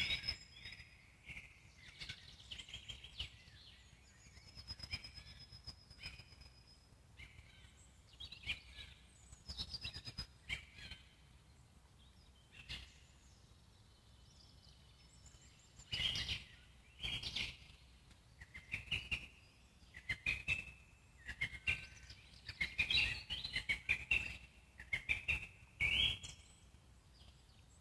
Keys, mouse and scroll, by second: 2.0 alt+middle click, 2.5 click, 2.9-3.2 scroll down 1, 3.2-4.5 middle drag, 4.5 f, 6.3-8.9 drag, 8.9 middle click, 9.2-9.6 scroll down 1, 9.6-12.1 alt+middle drag, 12.1-13.3 drag, 13.3-14.3 middle drag, 14.3-15.3 drag, 15.3 ctrl+z, 15.8-16.2 scroll down 1, 16.2-18.0 alt+middle drag, 18.0 click, 18.7 f, 20.1-24.3 alt+middle drag, 24.3 click, 25.0-25.8 scroll down 2, 25.8 alt+middle click, 26.3-27.8 scroll up 1.